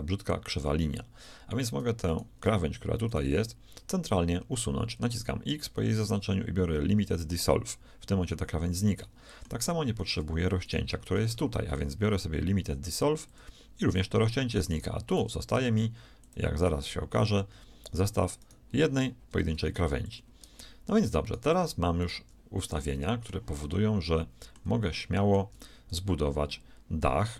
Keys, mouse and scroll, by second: 2.1-4.2 right drag, 4.2 middle click, 4.5 x, 9.0-10.4 middle drag, 10.4-12.4 right drag, 11.3 x, 14.7-20.3 right drag, 15.6 ctrl+Tab, 19.5 ctrl+Tab, 20.3 click, 21.2-22.8 right drag, 22.6 shift+click, 22.8-27.3 shift+middle drag.